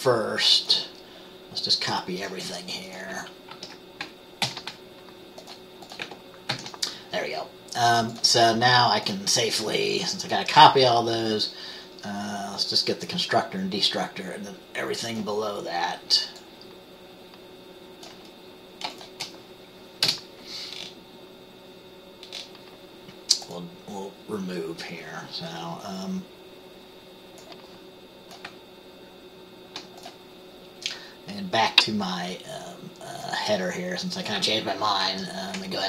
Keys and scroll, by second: 3.6 ctrl+a, 4.5 ctrl+c, 6.6 ctrl+v, 20.2 BackSpace, 35.2 ctrl+x.